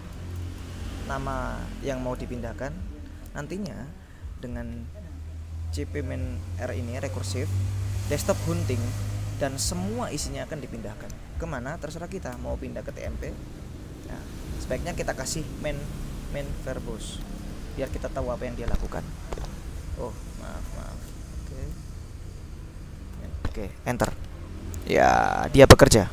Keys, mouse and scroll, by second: 0.2-2.0 typing, 2.2 Tab, 3.4 space, 6.0-8.3 drag, 8.8-10.1 drag, 12.4-13.8 typing, 14.5 ctrl+Left, 14.5 ctrl+BackSpace, 16.0-18.3 typing, 20.2 BackSpace, 20.3 Left, 21.2 BackSpace, 21.8 Right, 23.2 -, 24.1 Return.